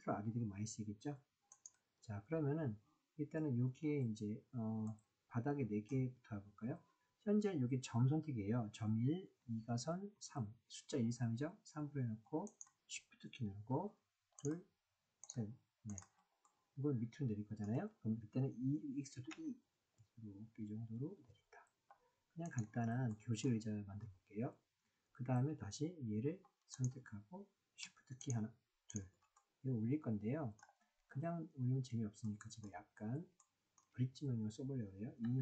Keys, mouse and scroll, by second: 1.5 click, 4.8-5.9 middle drag, 9.4 2, 10.1 3, 15.2 shift+click, 15.8 shift+click, 16.4-17.6 middle drag, 19.3 e, 22.4 click, 23.0 middle click, 29.3-30.6 middle drag, 32.2 shift+middle click, 33.4 shift+middle click, 35.2 e.